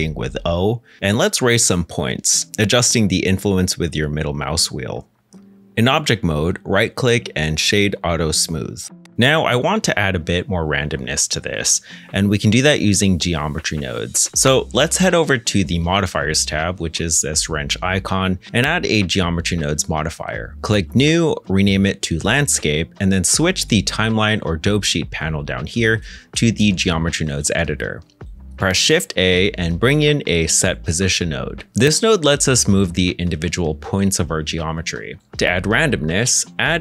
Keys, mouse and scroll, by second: 0.7 o, 1.9 middle click, 2.2 g, 2.3 z, 2.7-3.1 scroll down 1, 4.8 g, 5.8 scroll down 1, 6.0 Tab, 6.5 middle click, 7.5 right click, 9.8 middle click, 22.0-22.8 typing, 23.0 Return, 28.5 shift+middle click, 29.5 shift+a, 30.8-32.5 typing, 35.6-36.4 scroll down 1, 36.4 middle click, 36.7 shift+a.